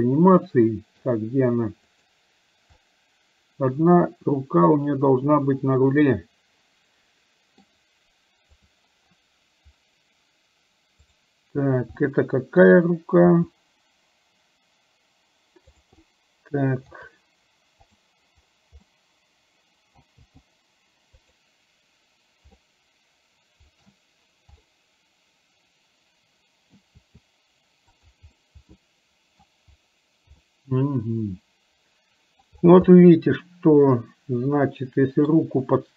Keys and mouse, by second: 2.1 click, 2.9-7.8 middle drag, 8.9 click, 11.1 click, 12.1 middle click, 16.1 middle click, 18.1 click, 18.9-20.0 middle drag, 22.6-23.9 middle drag, 24.6-26.9 middle drag, 28.4-29.4 middle drag, 30.5-32.5 middle drag, 32.9-35.4 middle drag.